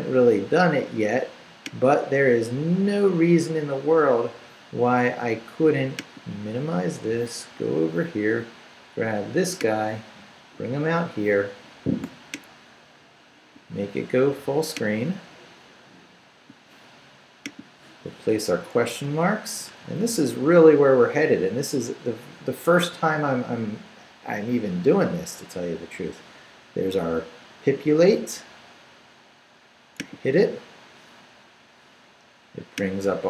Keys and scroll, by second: 18.5 shift+/, 18.9 shift+Return, 19.8 shift+/, 20.1 shift+Return, 21.1 Return.